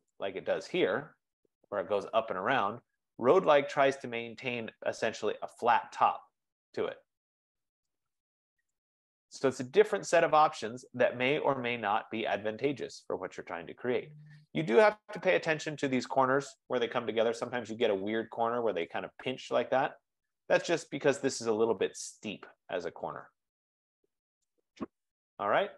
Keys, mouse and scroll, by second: 0.2 click, 3.6 click, 6.4-8.6 drag, 8.8 right click, 9.1-9.4 scroll down 5, 10.0 scroll up 1, 10.1 scroll down 3, 12.0 right click, 12.0-12.4 scroll, 13.2 scroll, 14.2-14.8 scroll, 15.3-15.9 scroll, 19.3 right click, 19.4 scroll down 10, 20.5-20.9 scroll down 2, 21.4 scroll, 24.7 right click, 24.9-25.7 scroll down 11.